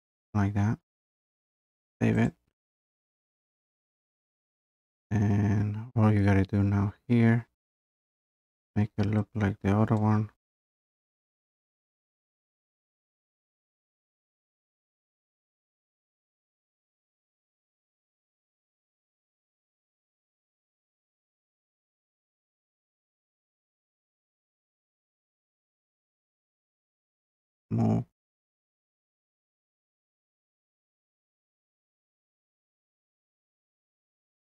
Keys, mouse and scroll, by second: 0.0-0.1 typing, 1.4 typing, 2.2 click, 5.3 scroll, 6.7 scroll, 7.4-10.0 scroll, 10.0 click, 10.2 scroll up 1, 11.3 click, 12.4 scroll, 12.5 scroll up 2, 12.8 click, 12.8-13.1 scroll, 13.5 Delete, 14.8 click, 16.3 Escape, 16.9 click, 18.1 click, 18.8 click, 19.4 Escape, 19.6 click, 20.2 click, 20.9 click, 21.8 scroll, 22.2 click, 22.4 click, 22.5 click, 24.6 click, 24.9 BackSpace, 25.0 BackSpace, 25.3 click, 26.2 click, 26.4 Escape, 26.9 click, 27.1 click, 28.0 m, 31.0 click, 32.6 click.